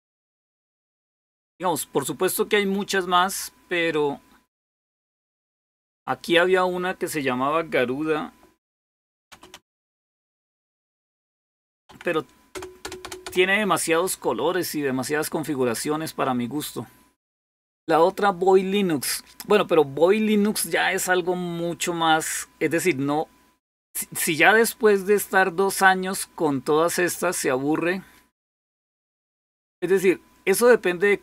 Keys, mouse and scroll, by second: 8.7-11.7 typing, 12.3 Return, 12.6 Return, 12.8 Return, 13.1 Return, 15.7-17.4 drag, 17.4 typing, 24.7-25.6 scroll up 2.